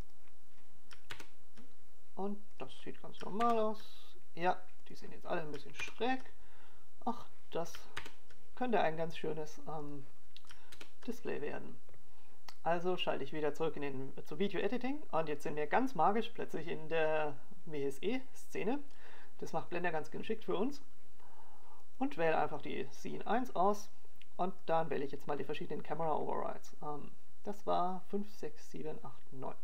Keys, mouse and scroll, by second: 1.4 ctrl+KP_0, 2.9 click, 4.1 ctrl+KP_0, 5.4 click, 6.3 ctrl+KP_0, 7.7 click, 8.7 ctrl+KP_0, 10.0 click, 11.0 ctrl+KP_0, 12.7 click, 13.7 ctrl+KP_0, 15.9 click.